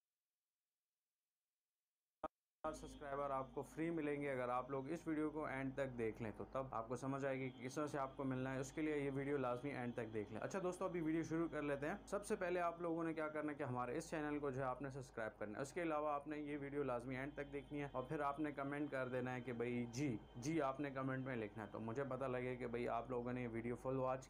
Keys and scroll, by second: 3.0 space.